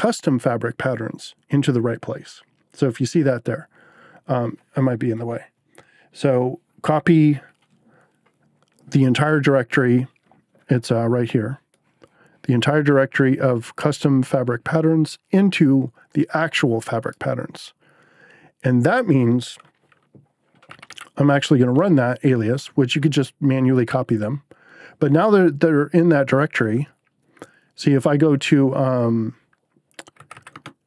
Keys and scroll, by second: 20.4-21.4 typing, 21.7 Return, 29.9-30.8 typing.